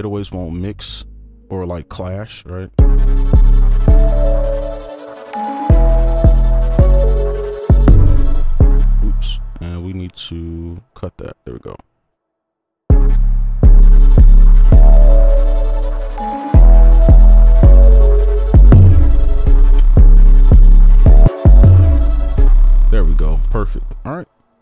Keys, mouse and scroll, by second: 2.5 right click, 3.1 space, 3.1 right click, 4.0-4.5 alt+scroll up 1, 4.5 right click, 8.4 space, 8.6 space, 8.8 space, 9.9 right click, 13.1 space, 13.6 space, 14.4 right click, 19.7 space, 19.9 space, 22.4 space, 22.9 right click, 23.4 ctrl+a, 23.9 shift+2, 24.0 shift+click.